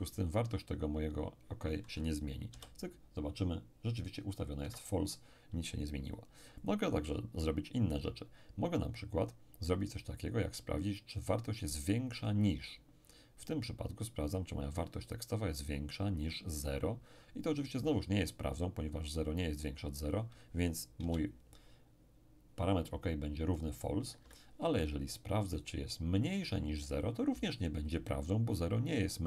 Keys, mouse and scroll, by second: 2.5 p, 4.6 Escape, 6.6 click, 12.2 click, 21.0 p, 24.1 Escape, 25.5 click, 26.8 click.